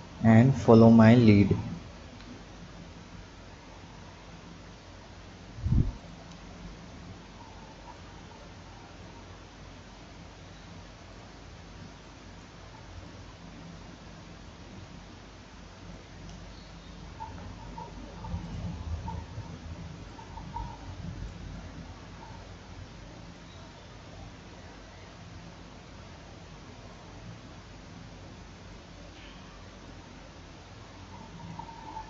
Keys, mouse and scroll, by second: 0.9 click, 1.6 click, 2.0 b, 3.3-6.0 drag, 6.3-7.4 scroll down 4, 7.4 b, 9.0-11.2 drag, 11.8 b, 13.1-16.1 drag, 17.1 KP_1, 18.0-18.4 scroll up 1, 18.4 drag, 19.3 b, 23.4-26.2 drag, 26.2 Tab, 27.0-29.2 drag, 29.2 Tab, 29.9-32.0 drag.